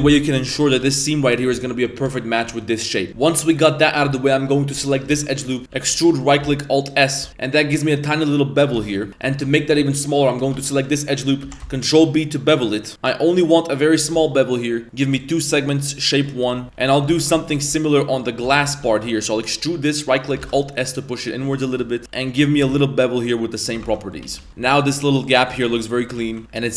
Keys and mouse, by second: 0.5 middle click, 0.8 g, 1.9 shift+right click, 2.8-3.1 middle drag, 3.1 Tab, 3.1 1, 3.3-4.0 middle drag, 4.1 shift+middle drag, 5.1 shift+s, 5.4 middle click, 5.7 e, 6.4 alt+s, 7.3 Tab, 7.3 middle click, 7.8 middle click, 8.8 Tab, 9.3 Tab, 9.6 Tab, 10.1 alt+right click, 11.4 ctrl+b, 15.1 click, 15.9 click, 16.5 Tab, 16.6 Tab, 16.6 1, 16.9 alt+right click, 17.2 shift+middle click, 17.3 z, 17.8 middle click, 18.5 shift+middle click, 18.9 middle click, 21.7 shift+middle click, 22.0 Tab, 22.0 2, 22.5 ctrl+b, 23.8 Tab, 23.9 middle click, 24.2 a, 24.5 middle click, 24.6 shift+middle click, 25.3 right click, 25.5 g, 25.9 middle drag, 26.1 a, 26.2 a, 26.3-26.7 middle drag.